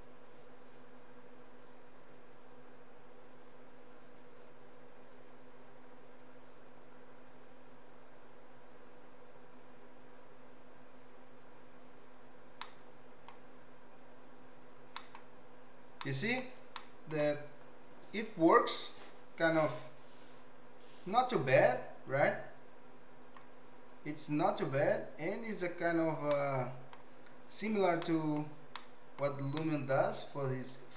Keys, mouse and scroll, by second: 12.5 middle click, 14.9 middle click, 16.0 middle click, 16.7 middle click, 26.3 middle click, 28.0 middle click, 28.7 middle click, 29.5 middle click.